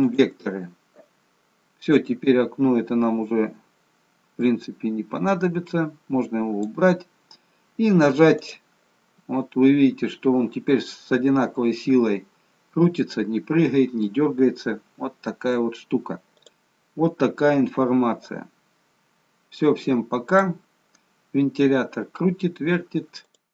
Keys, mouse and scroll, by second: 0.6 v, 4.5 click, 8.3 click, 16.5-17.0 scroll up 5, 20.4 click.